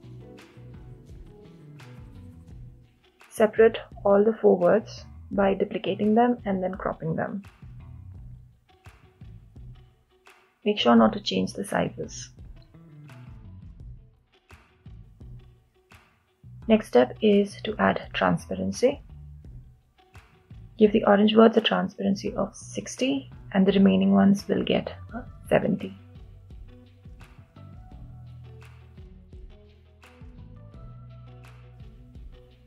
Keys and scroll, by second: 2.8 Return.